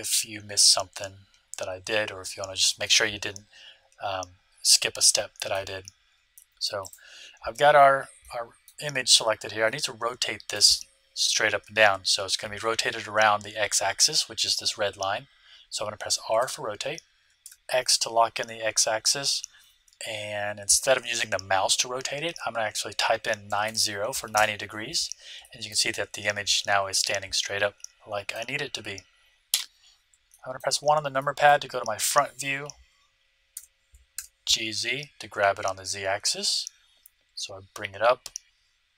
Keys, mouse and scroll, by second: 2.3-4.5 middle drag, 6.3 middle click, 6.8-7.9 drag, 6.8-8.5 right drag, 8.3 click, 8.5-11.4 middle drag, 16.3 r, 25.4-27.4 middle drag, 29.4 KP_1, 30.3-33.0 middle drag, 33.5 g.